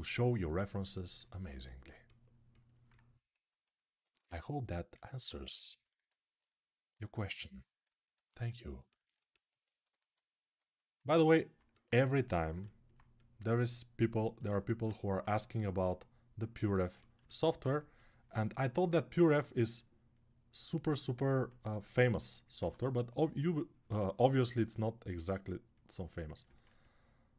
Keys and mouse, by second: 1.0-14.6 alt+right drag, 14.6 ctrl+alt+click, 14.9-16.9 right drag, 16.9 alt+click, 17.0 right click, 17.3 ctrl+alt+click, 17.7-20.9 alt+right drag, 17.9 alt+click, 22.3 1.